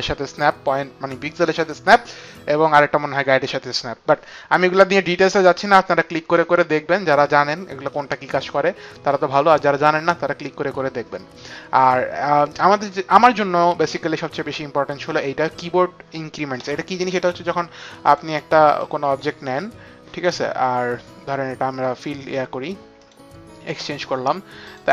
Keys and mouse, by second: 18.0 click, 18.7 click, 22.9 click, 24.5 click.